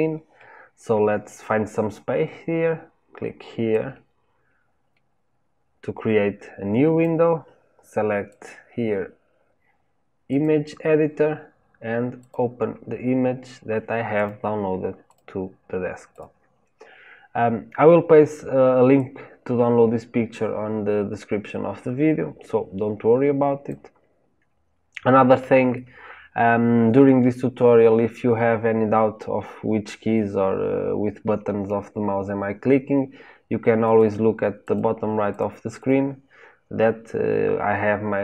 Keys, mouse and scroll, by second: 4.9-11.2 drag, 12.1-15.1 drag, 18.9-21.9 drag, 25.7-29.0 shift+middle drag, 33.8 click, 34.5 click, 35.2 click, 35.7 click.